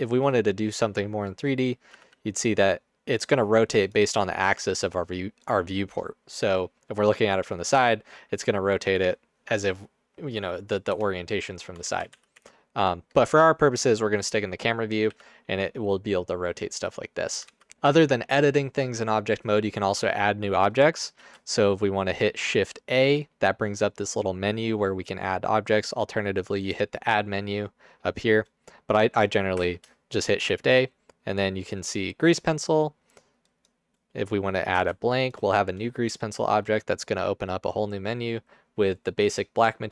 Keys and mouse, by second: 0.0 shift+middle click, 2.1 r, 3.8 click, 4.4 r, 7.2 middle click, 7.8 r, 10.3 click, 10.9 KP_0, 11.9 ctrl+z, 12.1 ctrl+z, 12.4 ctrl+z, 15.1 r, 17.5 ctrl+z, 21.2 shift+a, 26.7-27.0 drag, 29.6 shift+a, 34.9 g.